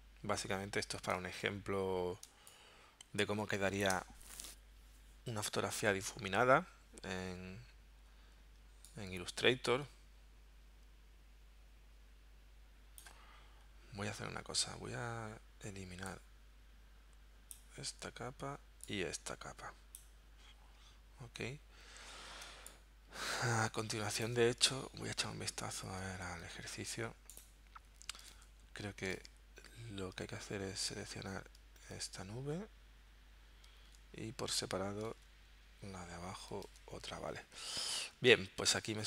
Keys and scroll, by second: 1.2 space, 2.3 space, 22.5 space, 24.9 super+Tab, 28.4 super+Tab, 29.2 super+Tab, 30.5 super+Tab, 32.0 super+Tab, 33.9 super+Tab, 35.2 super+Tab, 36.7 super+Tab.